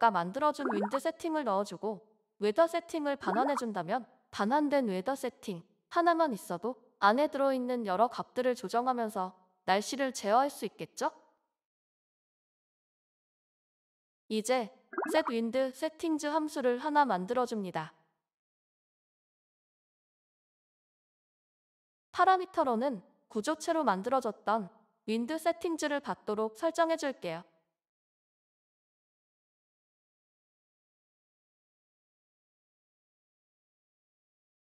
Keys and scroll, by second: 0.5-1.5 typing, 3.1-3.8 typing.